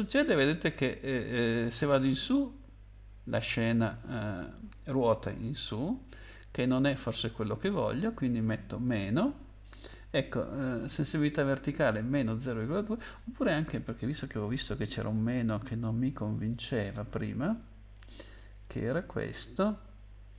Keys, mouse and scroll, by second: 6.1 click, 7.8 click, 8.8 -, 13.3 BackSpace, 14.4-15.6 scroll down 8, 17.4-18.5 scroll down 8.